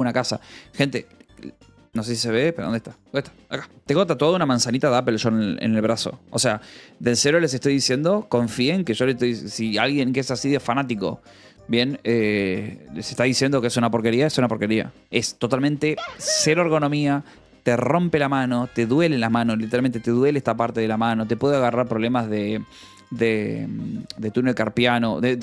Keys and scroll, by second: 1.7 o, 9.5 Delete.